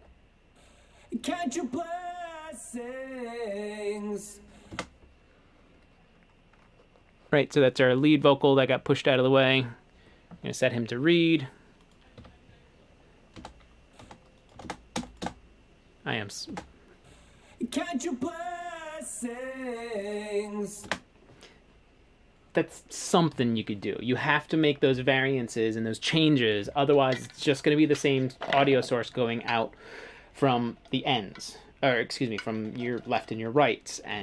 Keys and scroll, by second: 4.8 space, 12.3 a, 13.5 space, 14.7 space, 15.1 space, 15.3 space, 16.6 space, 20.9 space.